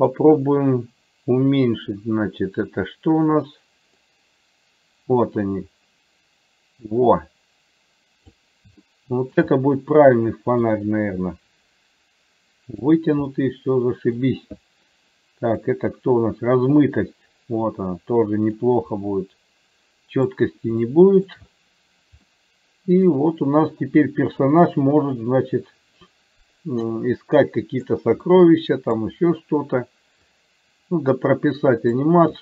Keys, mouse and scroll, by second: 0.0 click, 4.2-8.5 drag, 9.0 shift+middle click, 9.6-10.7 middle drag, 11.3-13.0 middle drag, 13.5 middle click, 15.7-18.7 drag, 19.1-20.5 middle drag, 21.0 shift+middle click, 22.5 middle click, 25.0-28.1 drag, 28.5 middle click, 30.5-32.2 drag.